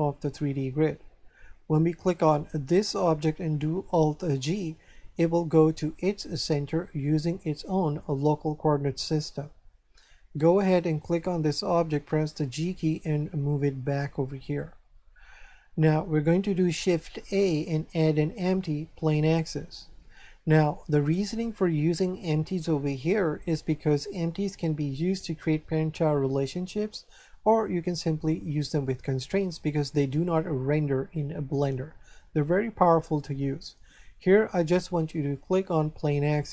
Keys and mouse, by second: 2.1 right click, 4.2 alt+g, 11.0 right click, 12.4 g, 14.4 click, 17.1 shift+a, 36.3 click.